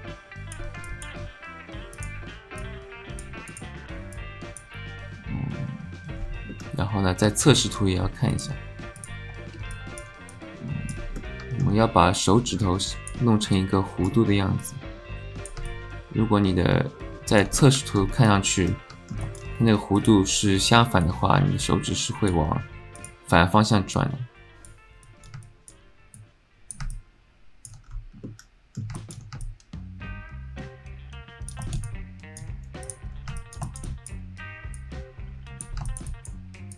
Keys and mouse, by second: 0.9 shift+click, 2.0 click, 2.6 click, 3.5 click, 4.2 click, 6.5-7.5 middle drag, 7.6 alt+shift+middle click, 8.4 alt+shift+click, 9.0 click, 9.7 alt+click, 10.4 click, 11.2 click, 11.4 alt+middle click, 12.2 click, 13.5 click, 14.6 click, 15.7 middle click, 15.7-17.4 alt+drag, 17.6 alt+click, 18.3 alt+click, 18.7 alt+click, 19.2 alt+shift+click, 21.1-22.3 drag, 22.9 click, 23.9 click, 25.0 click, 25.4 alt+middle click, 26.2 click, 26.9 alt+middle click, 27.8 middle click, 28.2 click, 29.0 shift+click, 29.4 click, 29.5-31.5 alt+middle drag, 31.6 alt+shift+click, 31.9 alt+click, 33.4 alt+middle click, 33.7 alt+shift+middle click, 33.9 alt+middle click, 34.8 click, 35.8 shift+click, 36.1 click.